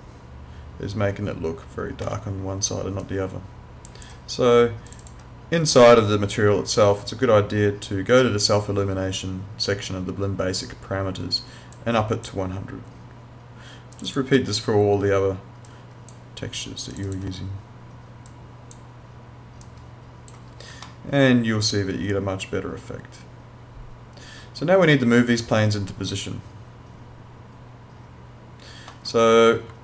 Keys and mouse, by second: 3.0 click, 11.7 click, 20.9 alt+middle click.